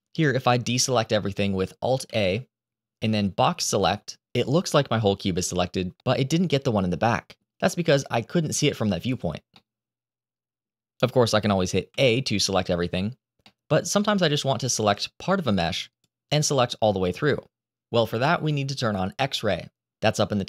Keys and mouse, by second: 1.9 alt+a, 3.2 click, 5.9-7.2 middle drag, 7.7 click, 8.4 click, 9.4-10.5 middle drag, 11.8 a, 13.3 middle click, 14.8-15.9 drag.